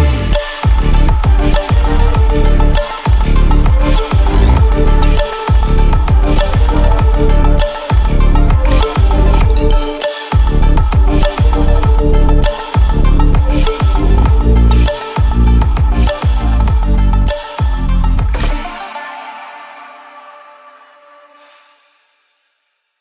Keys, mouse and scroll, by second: 1.4 shift+click, 2.6 shift+Down, 3.7 click, 5.3 ctrl+0, 6.3 v, 7.1-9.8 drag, 11.7 ctrl+z, 12.5 right click, 13.7-23.0 drag.